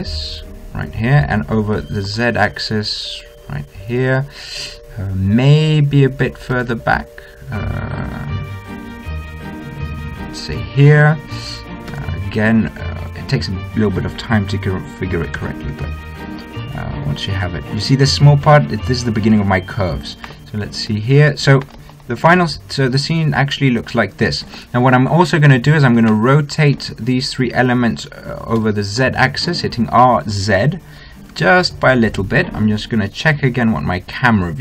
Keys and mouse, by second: 2.7 g, 7.5 g, 12.9 g, 18.6-23.4 middle drag, 23.4 click, 23.9 middle click, 24.8-26.7 middle drag, 27.2 middle click, 29.5 r.